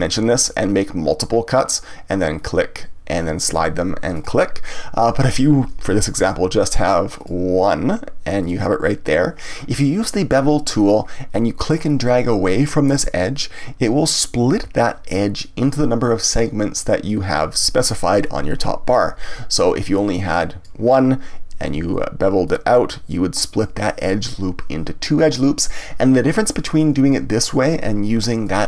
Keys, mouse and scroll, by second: 4.2 click, 5.1 ctrl+z, 6.2 ctrl+r, 8.4 click, 10.8-13.0 drag, 19.8-21.7 drag, 21.7 ctrl+z, 22.4 click, 28.4-28.6 drag.